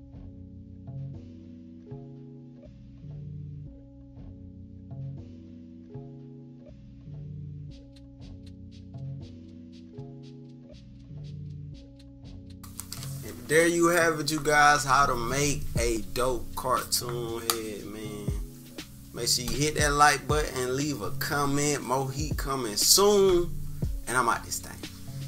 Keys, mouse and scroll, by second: 0.1 click, 0.6 click, 0.9 click, 1.4 click, 1.7 click, 2.1-6.2 drag, 6.4 click, 7.1 click, 7.4 click, 7.6-8.9 typing, 8.0 scroll down 2, 8.5 scroll down 1, 9.6 click, 9.8 click, 10.9 click, 11.5 -, 11.7-12.1 scroll up 4, 11.9 -, 12.5 click.